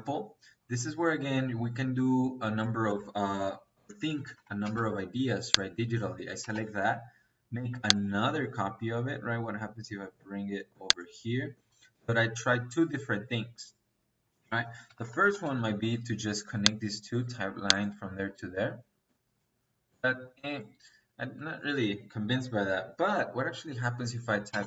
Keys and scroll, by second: 2.7 Escape, 3.8-4.5 typing, 6.3 space, 11.2 Escape, 14.2 Escape, 14.9 l, 15.0 i, 15.2 n, 15.4 space, 24.4 space.